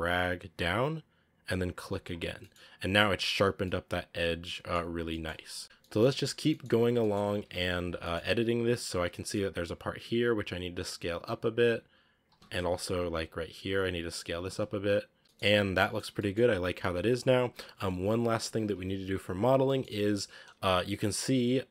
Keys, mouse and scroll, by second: 2.1 scroll down 1, 2.2 middle click, 2.9 Tab, 3.4 scroll down 1, 3.5-4.7 middle drag, 4.7 scroll down 4, 5.1 middle click, 5.6 KP_1, 5.6 shift+middle click, 5.9-6.3 scroll up 3, 6.4 shift+middle click, 6.5-6.8 scroll up 3, 6.9 shift+middle click, 7.2 scroll up 1, 7.3 Tab, 7.5 z, 7.9 shift+middle click, 8.1-8.4 scroll up 1, 8.4 a, 8.9 b, 9.7 scroll up 1, 9.9 s, 12.1 a, 12.4 b, 14.1 s, 14.3 Tab, 14.5 z, 14.7-15.1 scroll down 5, 15.1 a, 15.2-15.9 shift+middle drag, 15.9-16.7 scroll up 2, 16.0 middle drag, 16.7 right click, 18.3 KP_1, 18.8-19.3 scroll up 4, 19.5-20.3 shift+middle drag, 20.3 z, 21.6 scroll down 4.